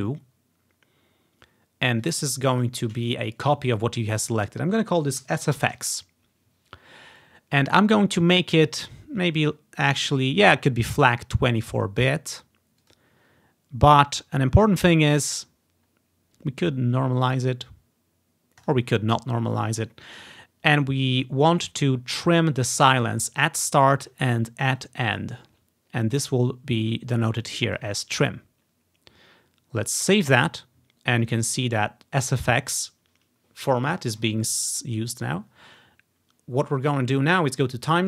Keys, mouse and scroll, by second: 5.3-5.7 typing, 11.0 click, 12.9 click, 18.7 click, 22.3 click, 24.9 click, 25.2 click, 27.5 click, 29.0 click, 30.1-31.6 drag.